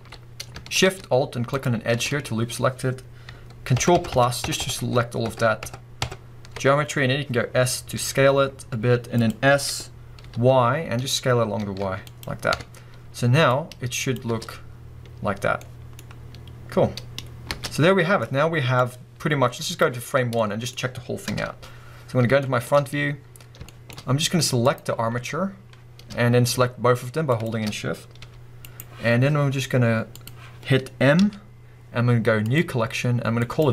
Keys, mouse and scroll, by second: 0.2-1.1 scroll up 1, 1.5 alt+shift+click, 3.8 ctrl+KP_Add, 7.5-8.0 scroll down 2, 9.3 click, 12.2 click, 12.6 Tab, 13.5-15.6 drag, 14.3 space, 15.6-18.8 middle drag, 17.5 space, 18.8-20.4 drag, 20.1 scroll down 2, 20.4-24.6 middle drag, 21.3 KP_1, 22.0-22.4 scroll up 2, 22.9-23.4 scroll up 2, 23.4 scroll down 2, 24.6 click, 27.3 shift+click, 28.2 g, 28.7 right click, 30.1 click, 30.8-31.2 scroll up 1, 31.2 m.